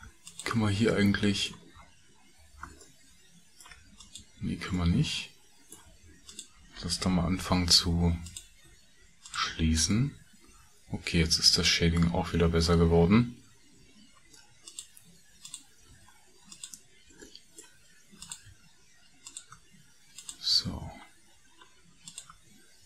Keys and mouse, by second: 0.2 alt+click, 2.8 ctrl+middle click, 6.3 shift+click, 8.7 shift+f, 9.2 click, 9.5 f, 9.9-12.0 middle drag, 14.0 middle click, 15.4 shift+middle click, 17.8 shift+f, 18.2 shift+middle click, 18.5 f, 19.2 middle click, 20.2 shift+middle click, 20.6 f, 22.0 click.